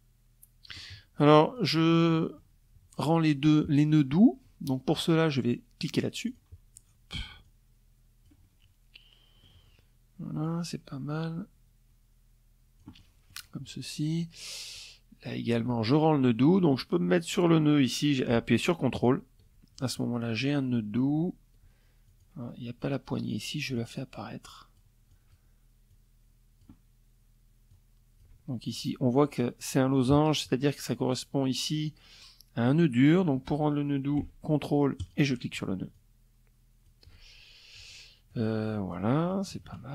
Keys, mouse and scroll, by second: 0.1 click, 0.6 middle click, 0.7 click, 4.8 click, 6.0-8.2 drag, 9.0-12.0 drag, 13.3 click, 17.5 ctrl+click, 18.3 ctrl+click, 20.6 ctrl+click, 22.3-23.5 drag, 23.6 click, 24.4 click, 26.2 click, 33.5 ctrl+click, 34.5-35.6 drag, 36.8 click, 38.1 KP_Subtract, 39.3 KP_Subtract.